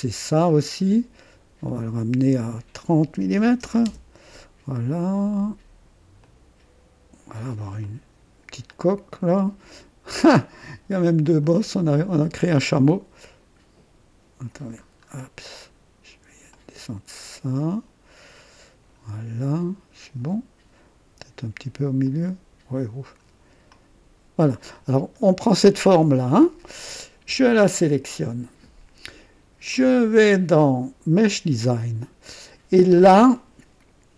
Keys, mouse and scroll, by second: 1.6 click, 3.3 KP_3, 3.6 KP_0, 3.8 KP_Enter, 6.2-7.5 drag, 7.5 typing, 7.8 click, 8.7-10.4 drag, 11.2 click, 12.5 typing, 14.8 scroll up 1, 16.5-19.1 drag, 22.0-23.3 drag, 23.7 click, 24.7-27.0 drag, 28.0 click, 31.3 click.